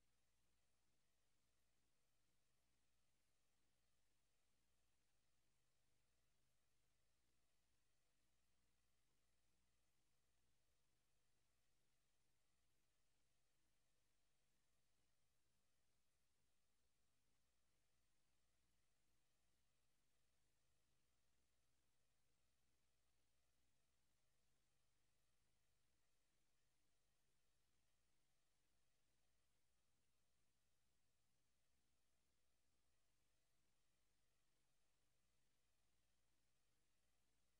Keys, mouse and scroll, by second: 6.5 click, 9.9 s, 12.0 middle click, 14.4 click, 17.6 Escape, 19.2 Delete, 20.9 click, 25.3 click, 26.8 s, 27.9 click, 28.7 click, 32.8 Escape, 35.3 click, 36.7 click.